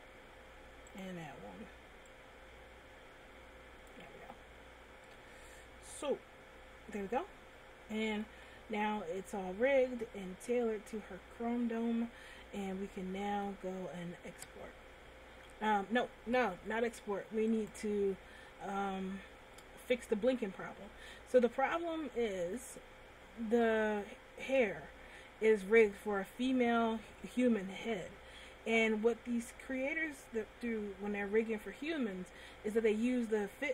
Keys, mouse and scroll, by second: 0.6 Tab, 1.3 right click, 2.4 click, 4.4 Tab, 4.9-5.3 scroll down 1, 5.3 middle click, 8.7 scroll down 2, 9.5 middle click, 14.3-14.9 scroll up 1, 15.7-16.2 scroll down 1, 17.8 right click, 21.4 middle click, 23.3-24.2 scroll up 2, 24.2 shift+middle click, 26.1 middle click, 30.7 scroll up 1, 32.1 middle click.